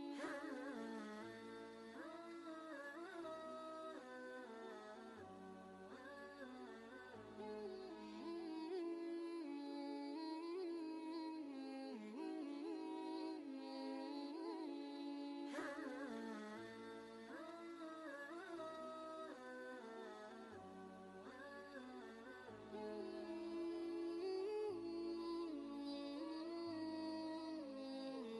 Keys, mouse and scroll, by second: 5.2-7.3 alt+drag, 9.7 ctrl+a, 10.7-11.4 typing, 15.6 shift+f, 16.9 Left, 19.4 shift+o, 20.8 ctrl+Return, 20.8 typing, 22.2 ctrl+space, 22.3 ctrl+click, 22.7 ctrl+space.